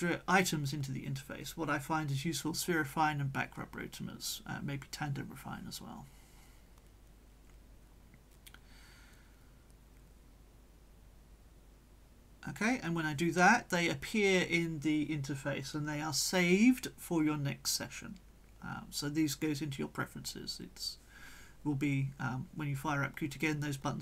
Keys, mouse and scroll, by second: 0.1 scroll up 2, 2.4 click, 3.5-3.9 scroll down 2, 4.6 click, 12.1 click, 13.3 click, 20.7-21.0 scroll down 1, 21.3-23.2 scroll down 4, 23.5-23.8 scroll down 2.